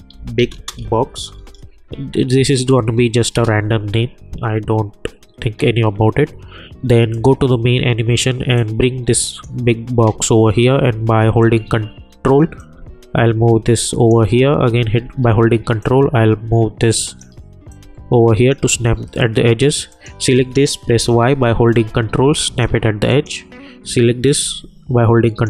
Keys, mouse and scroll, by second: 0.0-1.8 typing, 3.3 Return, 7.1-12.6 drag, 11.3 v, 12.6-15.0 drag, 15.0 ctrl+d, 15.8-17.7 drag, 17.7-19.9 drag, 20.9 y, 22.0-23.1 ctrl+drag, 24.5-25.4 ctrl+drag.